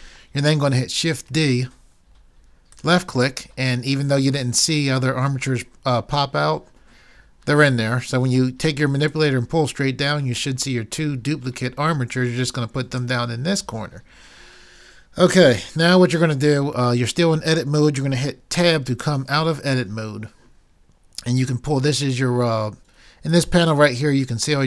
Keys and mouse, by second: 1.8 shift+d, 2.9 click, 9.1-11.1 drag, 18.6 Tab.